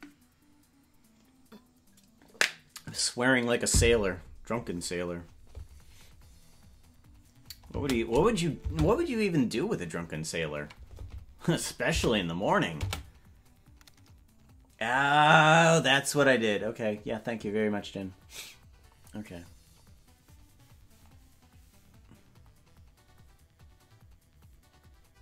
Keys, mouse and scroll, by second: 8.8 space, 12.9 space.